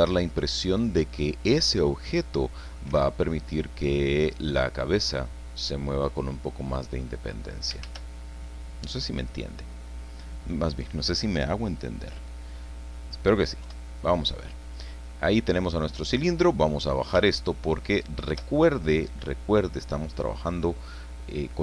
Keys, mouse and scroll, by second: 0.2 scroll up 1, 0.3-1.3 drag, 1.4-1.7 scroll down 2, 2.4 click, 2.9 a, 3.3-4.5 drag, 4.5-4.9 scroll up 2, 5.0 scroll down 2, 6.3-7.5 drag, 7.8 shift+a, 9.2 click, 9.9-15.3 middle drag, 13.6 KP_1, 16.1-17.2 drag, 17.3-18.6 shift+middle drag.